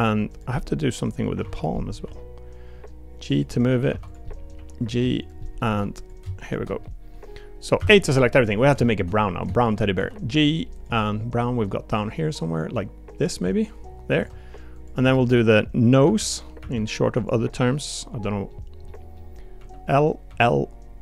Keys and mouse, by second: 0.5 middle click, 1.4 2, 1.5 click, 1.7 middle click, 2.0 g, 3.5 middle click, 3.9 3, 4.1 click, 4.2 middle click, 4.5 g, 5.4 middle click, 5.7 3, 6.0 click, 6.8 middle click, 7.8 a, 8.9 shift+middle click, 9.6 shift+middle click, 9.9 g, 11.1 middle click, 11.9 g, 14.1 Tab, 15.0 Tab, 15.2 click, 16.0 l, 16.6 l, 17.2 click, 18.2 middle click, 18.8 middle click, 18.8 click, 20.3 click.